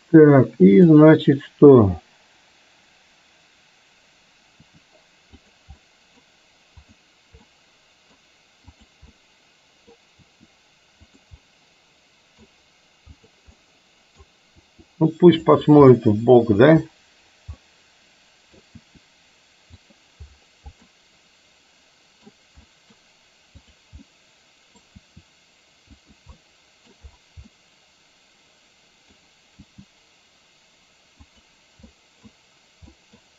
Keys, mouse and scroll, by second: 0.8 click, 4.7 r, 5.8-6.3 middle drag, 6.9 drag, 7.6 middle click, 8.8 click, 9.2-9.9 middle drag, 10.3 r, 11.4-12.4 middle drag, 13.7-14.3 middle drag, 14.7 r, 15.9-16.7 middle drag, 17.7-18.7 middle drag, 18.9 r, 20.9-22.3 middle drag, 22.7-23.1 middle drag, 24.2-24.8 middle drag, 25.1 r, 26.4 middle click, 27.4-29.2 middle drag, 29.6 g, 31.9-32.3 middle drag, 32.9-33.3 middle drag.